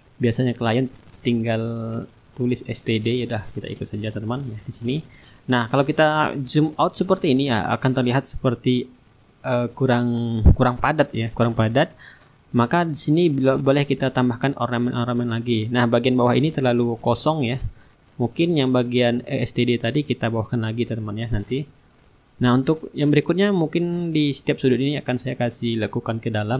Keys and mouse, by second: 1.1 click, 2.8-8.6 shift+drag, 4.6-8.6 shift+right drag, 6.2-8.6 middle drag, 9.7 middle click, 10.3 shift+click, 10.5-13.7 shift+middle drag, 21.6 click, 24.7-26.5 drag.